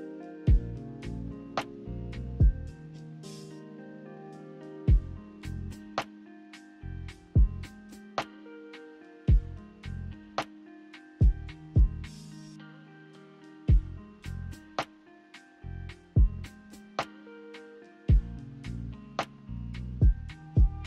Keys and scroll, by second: 9.2 a, 10.8 Delete, 13.7 w, 16.1 ctrl+z.